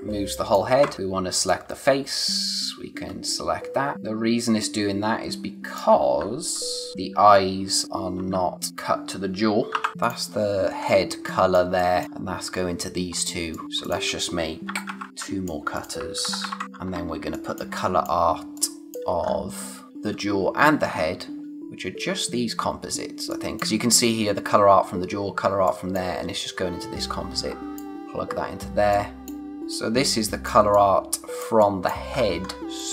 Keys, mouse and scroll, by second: 0.7 ctrl+z, 0.9 click, 6.9 ctrl+z, 8.7 click, 9.7 scroll up 1, 10.0 click, 10.7 scroll down 1, 11.0 space, 11.3 click, 11.5 space, 12.0-12.5 scroll up 1, 13.0 scroll down 1, 13.4 space, 13.5 click, 13.6 scroll up 1, 13.8 click, 14.6 ctrl+c, 14.9 ctrl+v, 15.1 click, 15.7 click, 16.2 ctrl+c, 16.4 ctrl+v, 16.9 scroll down 1, 17.1 space, 17.3 click, 17.6 space, 19.2 scroll up 1, 19.9 space, 20.8-21.4 scroll up 1, 21.4 space, 23.3 click, 25.4 space, 25.6 click, 26.0 space, 27.0 click, 27.7-28.5 scroll up 1, 28.7 space, 28.9 click, 29.2 space, 29.4 scroll down 1, 29.7 click, 29.9 space, 30.7 click, 32.1-32.8 scroll up 1, 32.8 click.